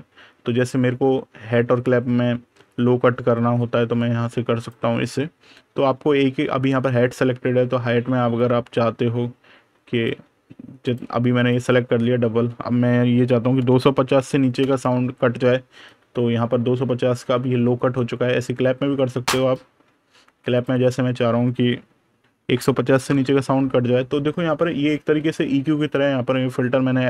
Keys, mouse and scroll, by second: 1.4 click, 8.2 click, 11.4 click, 13.3 KP_2, 14.4 Return, 15.9 super+KP_Add, 16.9 super+KP_Subtract, 19.2 click, 22.2 KP_1, 22.5 KP_0, 22.9 Return, 24.2 super+KP_Subtract, 25.1 super+KP_Add.